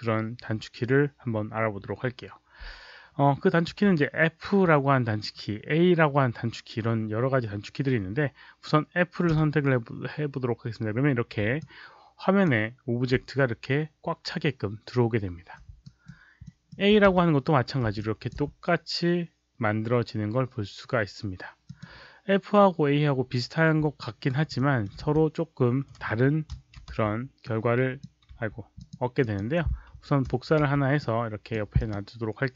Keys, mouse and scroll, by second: 9.2 f, 11.5-12.4 alt+drag, 15.8 alt+right click, 16.4 alt+middle click, 17.0 a, 17.9-18.2 alt+drag, 21.6 click, 23.9 alt+right click, 24.5 alt+middle drag, 24.9 w, 26.5 ctrl+shift+d, 26.8 w, 27.4 click, 28.3 z, 28.7 click, 29.1 click, 30.2 ctrl+d, 30.6 w, 30.9 click, 31.7 click.